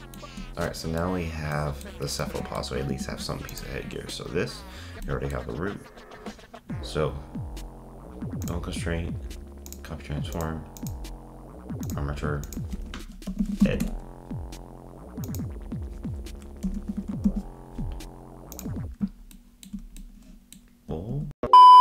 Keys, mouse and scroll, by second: 2.9 ctrl+Tab, 3.5 click, 5.0-8.0 middle drag, 8.4-10.4 drag, 10.8-18.4 drag, 19.3-20.9 shift+middle drag, 21.1 z.